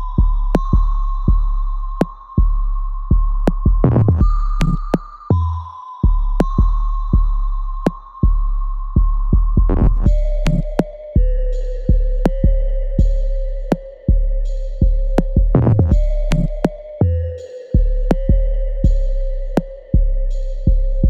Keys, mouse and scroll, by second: 0.5-2.0 alt+drag, 2.0 alt+right click, 2.7 ctrl+click, 4.0-6.1 alt+drag, 8.1 alt+middle click, 8.5-10.2 alt+drag, 10.2 alt+middle click, 10.5-12.5 alt+drag, 13.6 alt+middle click, 14.1 alt+right click, 14.5 alt+click, 14.9-17.4 alt+middle drag, 17.4 click, 19.3-21.0 ctrl+drag.